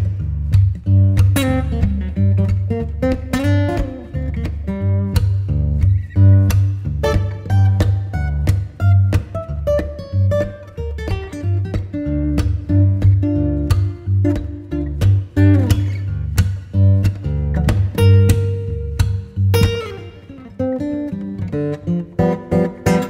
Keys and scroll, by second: 3.0 c, 9.3 c, 13.5 c, 14.8 Escape, 16.5 e, 16.8 Escape, 17.0 F2, 22.1 ctrl+r.